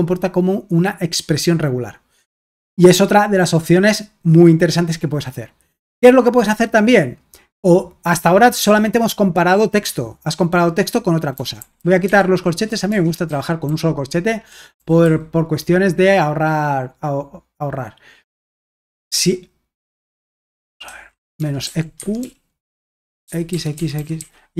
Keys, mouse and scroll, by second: 8.6 typing, 11.3-15.5 typing, 18.5-24.5 typing.